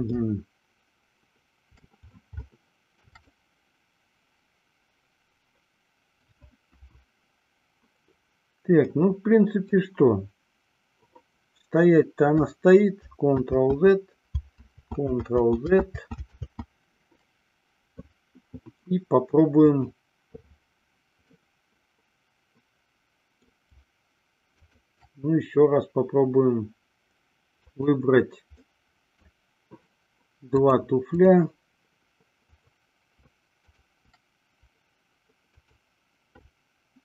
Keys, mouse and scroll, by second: 0.3-2.1 shift+middle drag, 2.6-3.3 shift+middle drag, 3.4-6.6 middle drag, 6.9 KP_1, 9.1-9.9 middle drag, 13.9 ctrl+z, 15.2 ctrl+z, 15.8 ctrl+z, 16.3 ctrl+z, 17.0 ctrl+z, 19.8 click, 21.4-23.7 middle drag, 24.7 shift+click, 28.7-29.6 middle drag, 30.7-31.7 drag, 32.7 click, 33.8 shift+click.